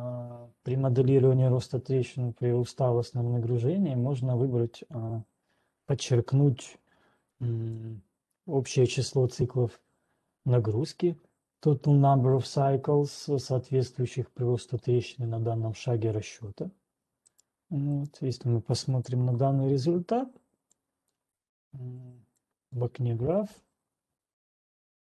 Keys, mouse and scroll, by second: 9.0 click, 17.5 right click, 18.3 right click, 18.8 click, 19.8 click, 23.1 right click.